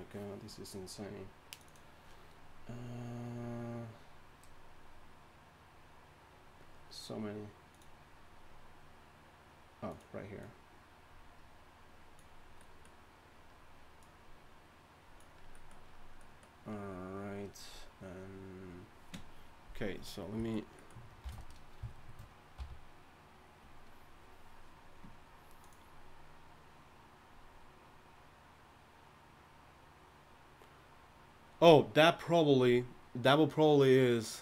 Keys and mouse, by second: 21.2 shift+c, 22.6 f.